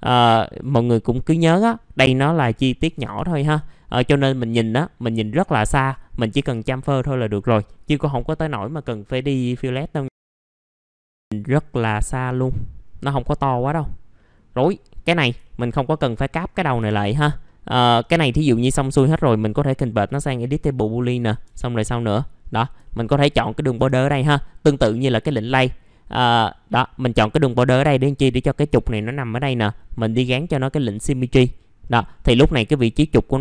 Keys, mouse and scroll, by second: 0.6-2.2 drag, 2.3 right click, 3.3-4.1 scroll down 1, 5.7 click, 6.1-7.1 scroll up 1, 7.1 middle click, 7.8 click, 10.1 alt+middle click, 10.4 alt+middle click, 10.7 scroll up 1, 10.9 alt+middle click, 11.1-11.4 scroll down 1, 11.9 middle click, 12.4-13.5 scroll up 1, 13.5 middle click, 15.4 alt+middle click, 15.8-16.4 scroll up 1, 16.5 f, 16.9-17.4 scroll down 1, 17.4 middle click, 20.5 click, 22.8 alt+middle click, 24.2-24.9 scroll down 1, 27.5 middle click, 30.9 click, 31.8 middle click, 32.0 scroll down 1.